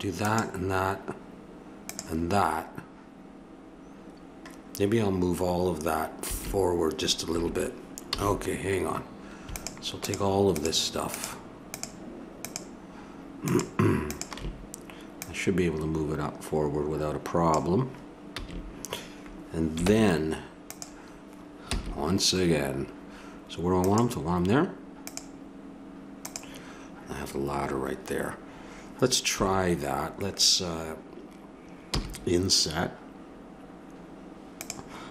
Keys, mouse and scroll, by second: 8.1 a, 9.5-16.9 drag, 18.3 a, 19.9 ctrl+Tab, 21.7 c, 31.9 i.